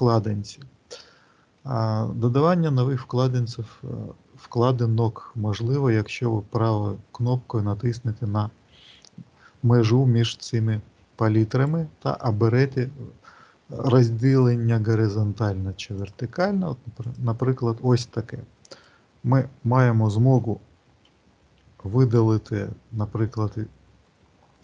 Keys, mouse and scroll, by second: 0.0-1.0 scroll down 2, 11.4 right click, 18.5 click, 20.2 n, 22.0 t.